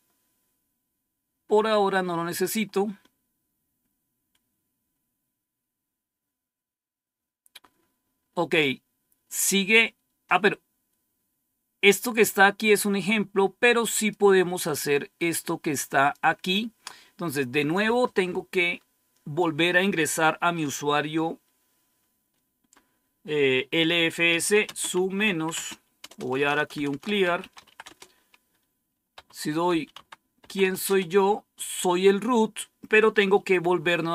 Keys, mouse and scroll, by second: 0.6-2.0 scroll up 2, 2.1-3.5 scroll up 3, 4.2-5.7 scroll down 3, 5.7-6.8 scroll down 1, 6.8-11.0 scroll down 1, 11.0-11.9 scroll up 2, 13.1-13.9 scroll down 2, 13.9 click, 14.6-16.1 drag, 17.5 click, 24.0-31.0 typing.